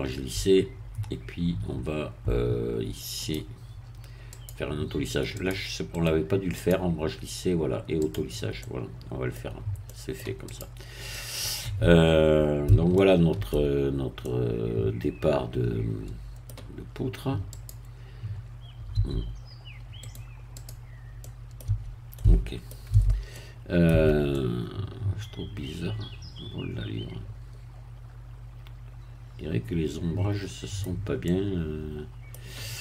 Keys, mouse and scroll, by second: 3.2 click, 4.3 click, 5.4 click, 5.9 right click, 6.6 click, 8.0 click, 8.6 middle click, 9.4-9.9 scroll down 1, 9.9 middle click, 10.5 click, 11.1-12.8 middle drag, 12.9 shift+middle click, 13.8 shift+scroll up 1, 14.2-17.0 middle drag, 17.5 click, 18.9 Caps_Lock, 20.1 right click, 20.5 click, 21.2 middle click, 21.7 Caps_Lock, 22.1 middle click, 22.9 Tab, 23.3 middle click, 23.9 Tab, 24.3-32.8 middle drag.